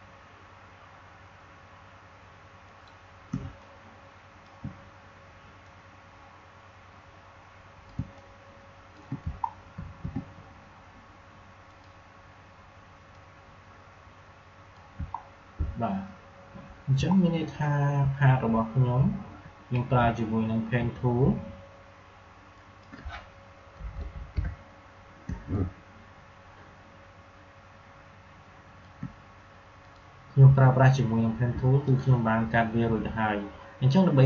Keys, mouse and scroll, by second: 2.6 click, 3.2 space, 3.5 click, 3.7 space, 5.6-7.9 drag, 7.9 space, 8.1 click, 8.3 space, 9.4 alt+scroll up 1, 9.9 space, 11.6-15.1 drag, 15.1 alt+scroll down 1, 17.0 alt+scroll up 1, 18.1-18.5 alt+scroll down 2, 19.1 alt+scroll up 1, 20.0 alt+scroll down 1, 22.4 click, 25.3 space, 25.4 click, 25.6 space, 27.3 space, 29.8 click.